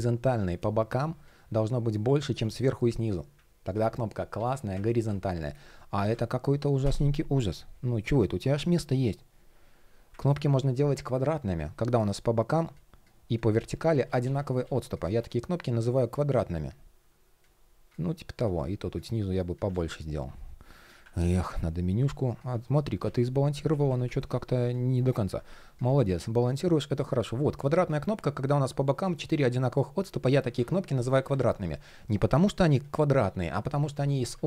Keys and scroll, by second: 0.1 shift+p, 0.2 alt+shift+l, 3.4 super+z, 4.6 super+z, 5.1 super+z, 5.6 super+z, 11.5 shift+p, 13.7 super+z, 19.3 super+z, 20.7 super+\, 24.9 super+\, 26.6 shift+p, 30.5 super+z, 33.3 super+z.